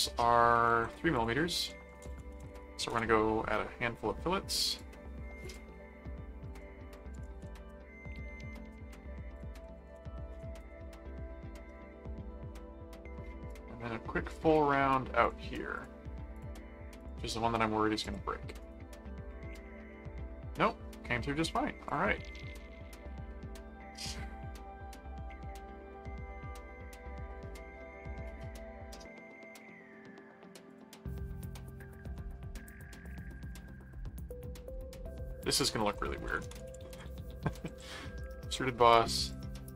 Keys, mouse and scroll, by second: 0.7 ctrl+Tab, 1.1 click, 1.6-3.0 typing, 4.7 click, 5.4 click, 6.5 click, 6.9-7.8 typing, 8.6 Return, 9.3 click, 9.4-10.9 typing, 13.4 click, 14.3 click, 14.5 middle click, 15.2-16.3 drag, 16.4 click, 17.0 click, 17.3 middle click, 18.0 click, 18.6 right click, 19.3-21.5 middle drag, 21.8 click, 22.2-30.5 middle drag, 30.7 click, 32.4 ctrl+middle click, 32.8 ctrl+5, 33.9 ctrl+middle click, 34.7 ctrl+6, 35.5 click, 35.7-37.5 typing, 38.2 Return, 38.8 click.